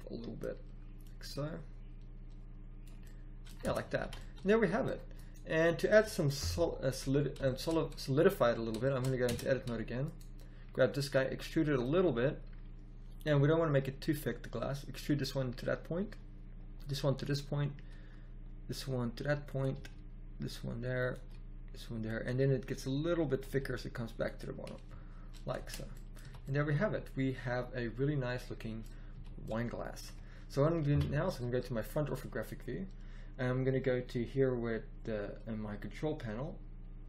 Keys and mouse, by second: 0.9 click, 3.6 Tab, 4.0 a, 6.3 KP_1, 7.0 z, 9.2 Tab, 11.0 e, 13.8 e, 15.9 e, 17.8 e, 19.7 e, 21.1 e, 22.2 e, 23.4 e, 25.5 Tab, 26.1 z, 29.0 a, 30.8 KP_1.